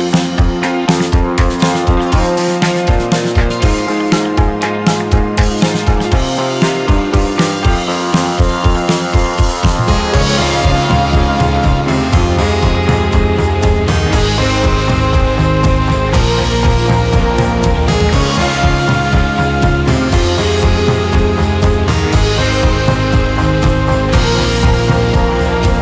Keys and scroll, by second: 2.9 4, 3.4 Return, 4.3 Return, 5.5 4, 6.0 Return, 14.1 2, 15.1 BackSpace, 15.2 4, 15.8 Return, 20.4 4, 20.9 Return.